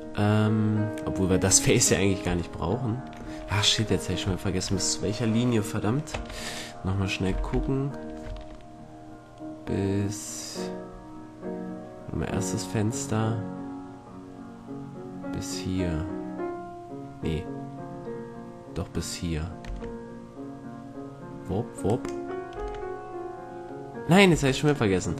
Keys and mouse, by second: 2.7 middle click, 6.3 Tab, 6.6 right click, 7.5 z, 8.5 Tab, 19.8 Tab, 22.7 Tab, 24.5 Tab, 24.7 right click.